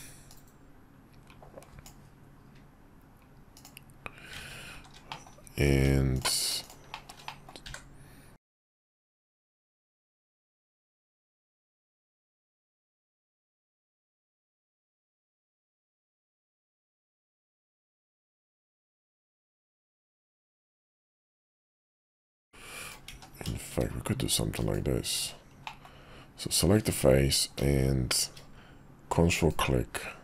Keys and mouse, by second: 4.7 shift+2, 5.1 middle click, 5.7 Tab, 6.1 click, 6.9 shift+middle click, 7.3 middle click, 7.6 f, 8.8 i, 11.1 middle click, 15.1 click, 15.7 \, 16.4 middle click, 18.3 e, 22.2 z, 23.1 ctrl+z, 24.6 shift+click, 25.7 middle click, 29.3 ctrl+click.